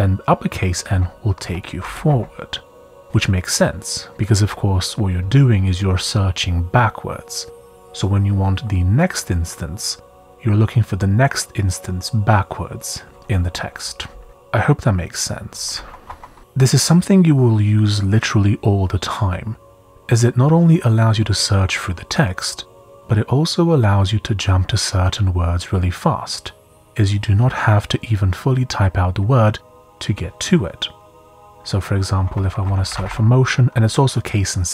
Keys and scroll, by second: 1.6 shift+n, 14.3 typing, 15.7 shift+i, 16.1 Escape, 25.0 Escape, 32.0-33.5 typing.